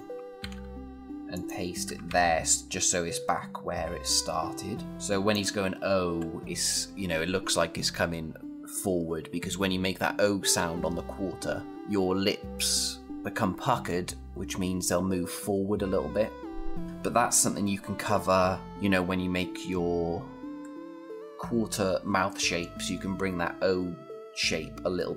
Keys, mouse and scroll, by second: 0.2 ctrl+c, 1.1 click, 1.9 ctrl+v, 3.8 click.